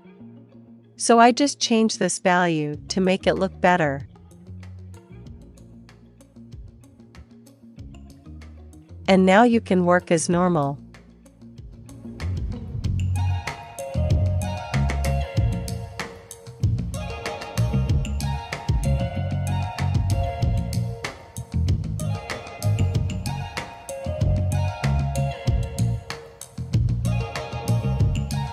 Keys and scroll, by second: 3.1-5.6 typing, 13.9-27.0 typing, 17.8 End, 17.9 Down, 19.1 super+s, 20.8 Down, 27.1 super+s.